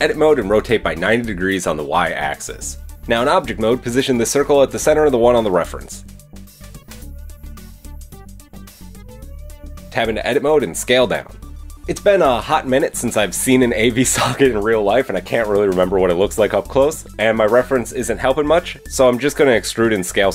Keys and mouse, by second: 1.1 r, 1.2 Tab, 3.3 Tab, 3.8 g, 7.8 middle click, 8.6 g, 9.4 middle click, 9.8-11.6 drag, 9.8 Tab, 12.8 s, 14.4 middle click, 14.8 middle click, 15.6 s, 18.2 s.